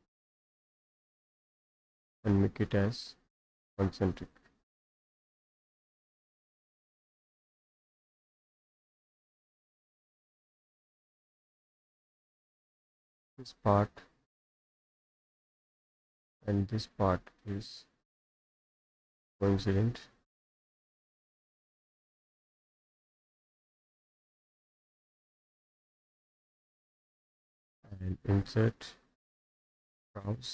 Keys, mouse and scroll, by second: 0.0-1.1 drag, 3.5 click, 5.0 click, 6.1 Escape, 6.4 Escape, 6.9 click, 7.3 Escape, 7.6 scroll down 1, 7.8 middle click, 8.4 Escape, 9.5 click, 10.8 click, 11.0 Escape, 13.1 click, 14.6 click, 15.5 click, 16.2 click, 16.9-18.0 drag, 19.5 click, 21.4 middle click, 22.9 click, 24.1 click, 25.0 Escape, 25.3 click, 25.9 middle click, 25.9-27.3 scroll, 26.6 middle click, 28.3 click, 29.8 click.